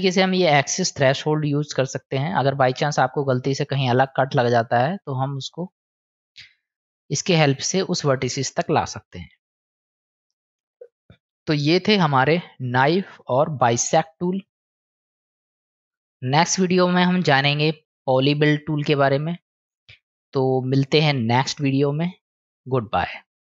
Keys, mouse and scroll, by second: 5.1-6.4 drag, 10.0 click, 12.4-13.3 drag, 15.3 ctrl+z, 22.0 click, 22.6 click.